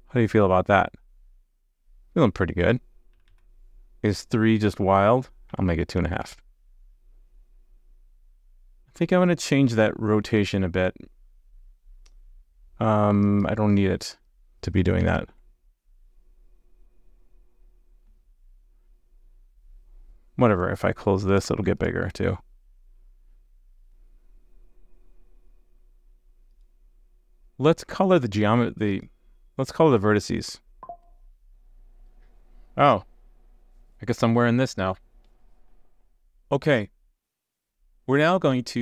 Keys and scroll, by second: 15.1 super+/.